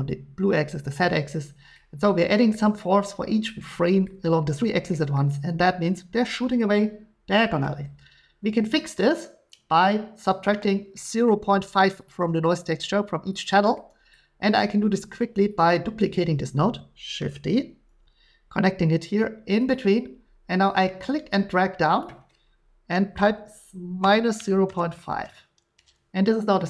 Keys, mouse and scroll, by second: 2.5-4.0 middle drag, 5.1 middle click, 11.3 middle click, 12.1 click, 12.1 g, 13.4 click, 14.1 middle click, 15.6 click, 17.2 d, 19.7 click, 22.2 click, 24.0-25.1 typing.